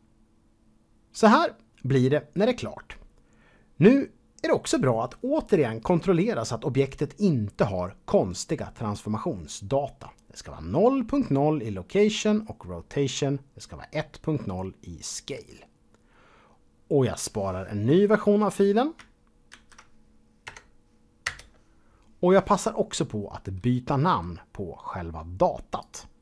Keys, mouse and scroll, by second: 0.1-1.8 scroll down 1, 19.5 ctrl+shift+s, 20.4 KP_Add, 21.2 Return, 25.8 click.